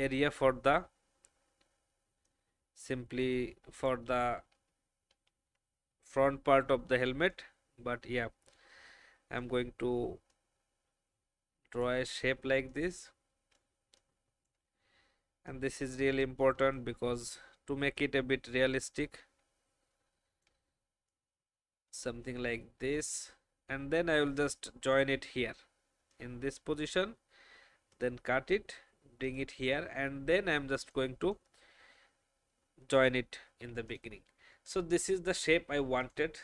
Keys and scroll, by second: 4.6 ctrl+z, 5.1 ctrl+z, 8.8 space, 13.9 space, 33.6 v.